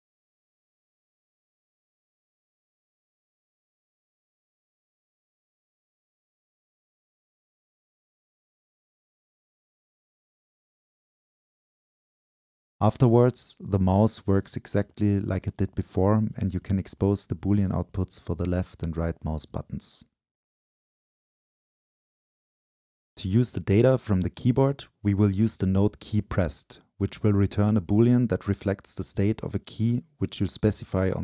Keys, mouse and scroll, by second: 0.0-0.3 drag, 1.1 ctrl+l, 1.7 click, 1.8-2.2 scroll down 2, 2.2-3.4 right drag, 5.4-10.3 shift+drag, 10.5-13.8 shift+drag, 13.8-15.3 scroll up 2, 15.3 click, 16.3-17.1 middle drag, 17.1-17.8 drag, 17.8-18.8 middle drag, 18.8-21.5 drag, 21.5 right click.